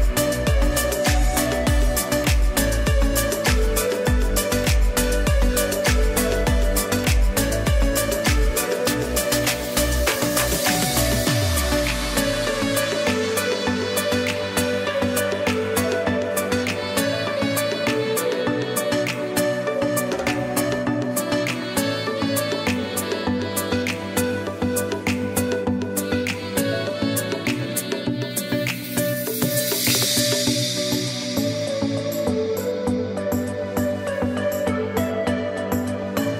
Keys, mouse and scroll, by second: 2.0 click, 7.8 click, 8.4 ], 9.8 click, 9.8 ], 12.8 click, 13.1 typing, 15.2 click, 15.8-16.2 typing, 16.1 click, 19.6 click, 20.0-20.5 typing, 20.2 click, 21.3 click, 21.8 typing, 24.5 typing, 24.8 ctrl+e, 25.9 click, 31.1 ctrl+alt+shift+e, 32.0 click, 34.5 z, 35.1 click, 35.9 space, 36.2 click.